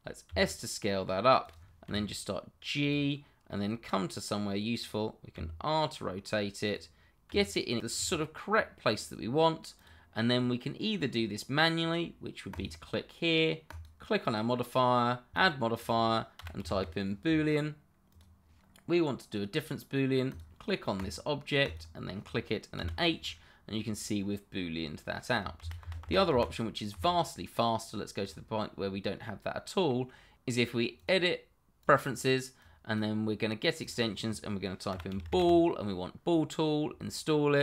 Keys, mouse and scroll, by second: 0.2 s, 1.4 click, 1.8 g, 2.8 click, 3.4 middle click, 5.3 r, 6.6 click, 7.3 g, 8.0 click, 8.5-8.9 scroll up 1, 8.9 click, 12.5 click, 16.3 b, 16.6 o, 18.1 click, 20.3 click, 22.7 h, 23.2 middle click, 24.3 middle click, 25.6 ctrl+z, 28.2 click, 28.8 middle click, 30.9 click, 33.4 click, 34.9 b, 35.1 o, 35.4 l.